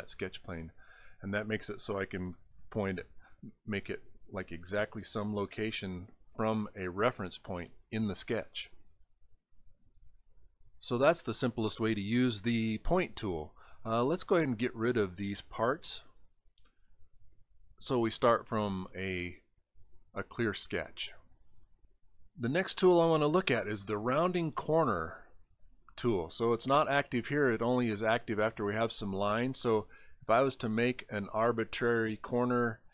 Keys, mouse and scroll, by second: 0.9 click, 5.8 middle click, 14.9 click, 16.3 shift+click, 25.5 click, 28.5 click, 29.5 click, 30.1 click, 31.3 click, 32.2 click, 32.8 click.